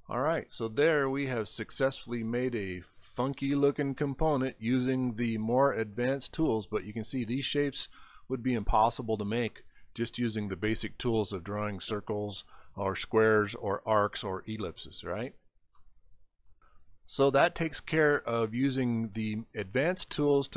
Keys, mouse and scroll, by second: 1.1 middle click, 2.3-3.1 scroll up 5, 7.8 middle click, 8.8 scroll up 1, 9.5 middle click, 15.0 scroll up 3, 15.8 scroll up 1, 17.3 middle click, 17.5 middle click, 20.0-20.3 scroll up 3.